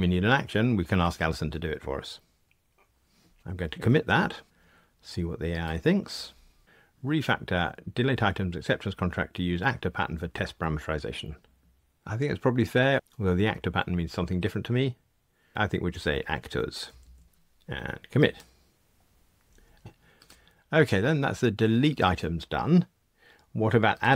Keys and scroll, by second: 4.4 super+k.